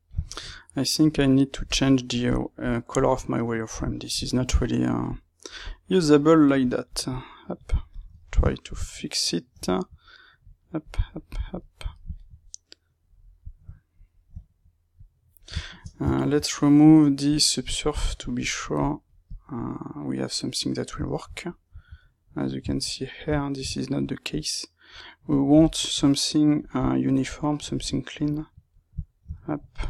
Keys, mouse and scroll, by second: 0.1 shift+middle click, 1.1-3.1 drag, 3.1-4.5 middle drag, 4.5-8.1 drag, 8.1-10.3 ctrl+shift+middle drag, 10.3-11.5 drag, 11.5-14.9 middle drag, 14.9 click, 15.5 shift+middle click, 16.1-18.3 alt+right drag, 18.3-19.7 drag, 19.7-24.2 middle drag, 24.2-27.3 drag, 27.3-29.7 middle drag, 29.7 click.